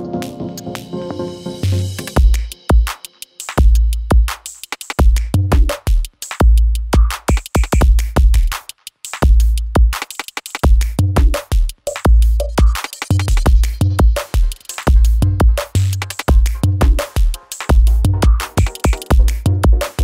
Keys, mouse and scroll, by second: 2.6-4.5 drag, 8.2 =, 10.0 click, 15.6 Return, 16.6-20.0 drag.